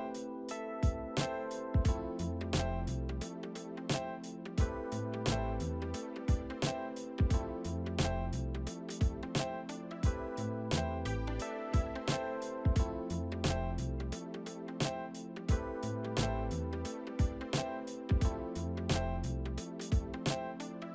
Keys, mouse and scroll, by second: 0.0-0.6 typing, 3.4 right click, 5.1 middle click, 9.7 middle click, 13.0 e, 14.0 right click.